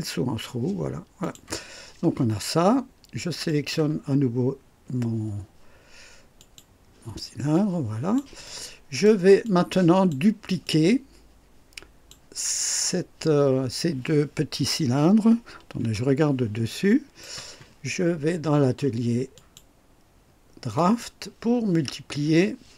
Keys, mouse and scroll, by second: 1.1 click, 3.4 click, 6.3 click, 7.5-8.3 drag, 8.4-9.2 drag, 9.4-10.2 drag, 10.6-12.2 drag, 15.7 KP_2, 16.6-17.4 right drag, 19.3 click, 20.7 click.